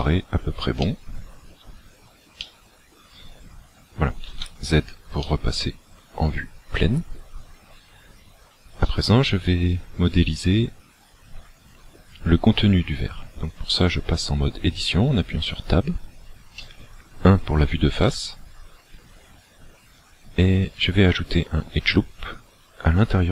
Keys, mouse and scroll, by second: 0.0 shift+middle click, 0.9 shift+middle click, 2.4 middle click, 3.3-4.1 scroll down 4, 4.2 z, 5.3 middle click, 8.9 middle click, 15.4 Tab, 18.1 KP_1.